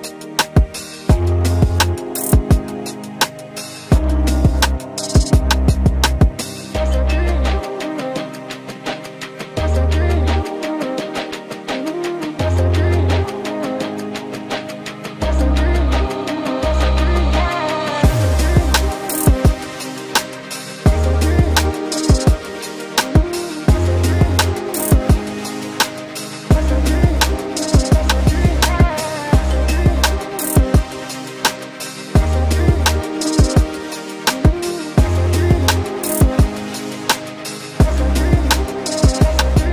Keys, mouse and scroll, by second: 8.0 ctrl+x, 10.6 ctrl+v.